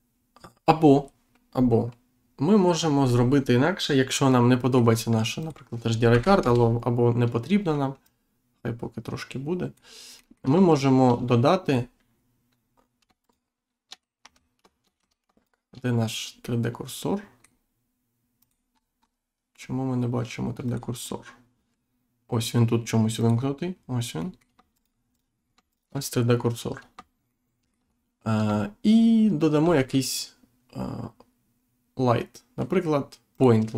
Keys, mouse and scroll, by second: 2.9 Insert, 3.3-3.7 scroll down 1, 5.4 click, 6.4 Return, 8.0 click, 10.1 middle click, 10.6 shift+right click, 11.6 click, 13.2 shift+right click, 14.2 Tab, 14.9 Tab, 15.3 shift+right click, 16.4 middle click, 18.4 click, 18.7-19.1 scroll up 1, 19.3-19.7 scroll up 1, 20.6 click, 23.1 click, 24.1 middle click, 24.7 shift+right click, 25.7 shift+right click, 27.2 shift+middle click, 29.6 shift+a, 33.3 click.